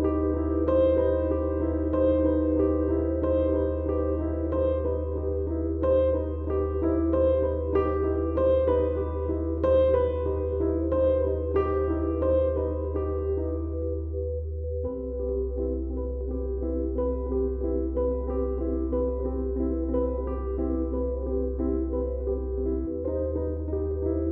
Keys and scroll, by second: 0.5 F1, 5.0 ], 11.6 Delete, 13.9 ctrl+d, 14.0 Escape.